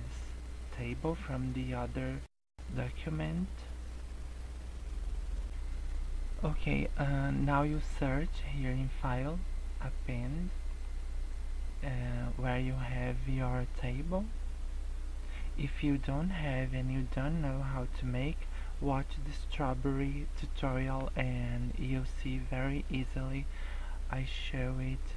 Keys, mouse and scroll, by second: 0.2 scroll up 5, 1.7 scroll down 1, 2.6 scroll up 1, 3.0 scroll down 1, 3.4 scroll up 2, 4.0-4.7 scroll down 3, 4.8 scroll up 1, 5.4 scroll up 1.